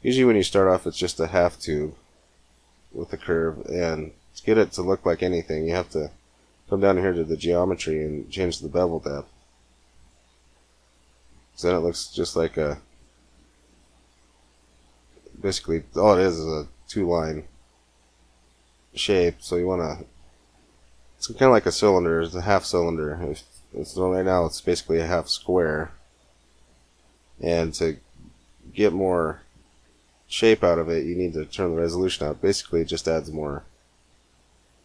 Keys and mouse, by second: 1.3 middle click, 3.1-4.3 middle drag, 9.1-11.0 drag, 11.5 middle click, 29.4-33.6 drag, 33.6-34.8 middle drag.